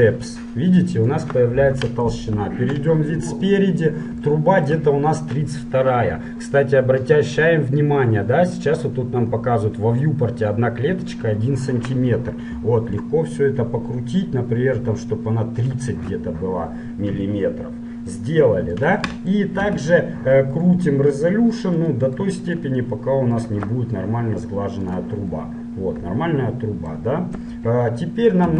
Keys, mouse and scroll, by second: 2.4 KP_1, 3.1-7.9 middle drag, 13.2-14.9 drag, 17.2-20.7 middle drag, 19.9 z, 21.7-26.9 drag, 25.6-27.4 middle drag, 27.5 KP_1.